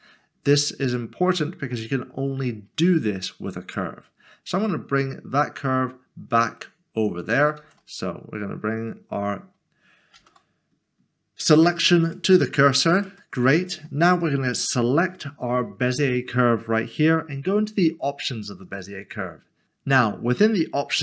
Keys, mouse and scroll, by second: 0.8 click, 1.7 middle click, 9.6-10.1 typing, 12.1 click, 13.6 click, 13.8 middle click, 14.2 click, 15.9 click, 16.1-18.1 scroll down 1, 18.6 click.